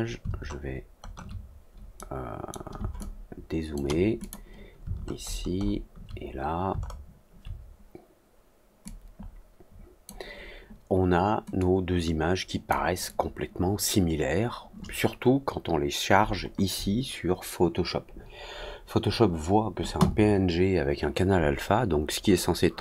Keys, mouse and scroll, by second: 1.9 middle click, 2.9 click, 4.1 click, 4.9 alt+middle click, 5.1 alt+middle click, 5.5 alt+middle click, 6.9 alt+middle click, 8.8-10.0 drag, 11.5-12.6 drag.